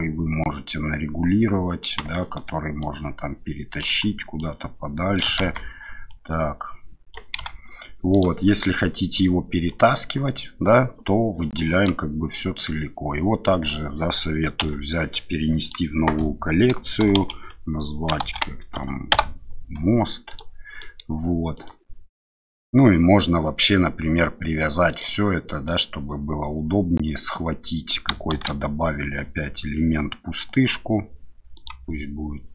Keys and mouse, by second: 2.1 shift+drag, 5.4 ctrl+z, 7.4 s, 8.1 click, 9.2-9.7 middle drag, 11.6 drag, 14.6 m, 20.8 middle click, 21.5 click, 28.3 shift+a.